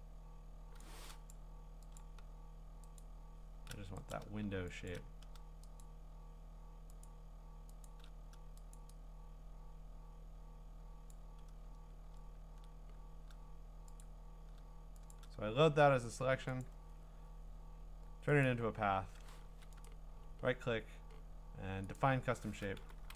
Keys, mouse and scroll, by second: 0.8 click, 1.3 click, 2.0 shift+click, 2.1 shift+click, 3.0 click, 4.9 shift+click, 5.8 shift+click, 7.0 shift+click, 7.9 shift+click, 11.1 click, 12.0 click, 14.0 click, 15.1 ctrl+click, 16.6 click, 18.5 click, 19.5 a, 19.9 right click, 22.0 click, 22.8-23.1 typing.